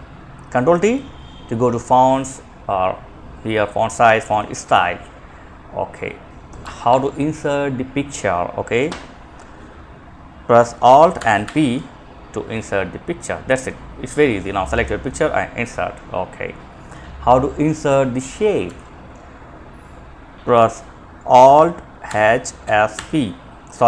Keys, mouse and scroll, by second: 5.8 Escape, 8.5 click, 10.4 alt+n, 10.6 p, 17.9 Escape, 21.3 alt+h, 21.8 s, 22.2 alt+h, 22.2 s.